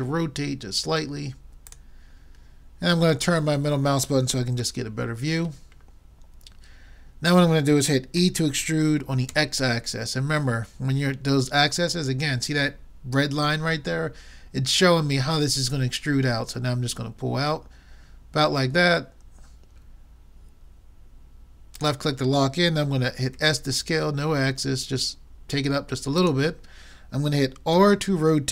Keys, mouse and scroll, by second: 6.6 middle click, 8.2 e, 23.4 s, 27.8 r.